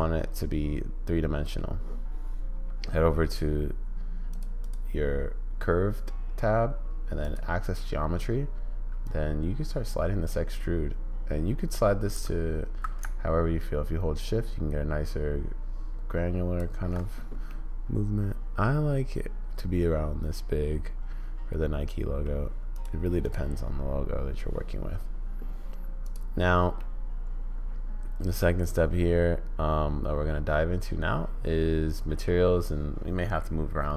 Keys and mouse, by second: 4.3 click, 7.2 click, 9.0-10.3 drag, 15.5-16.7 shift+drag, 17.5-22.3 middle drag, 23.2 middle click, 26.0 middle click, 27.0-32.2 middle drag.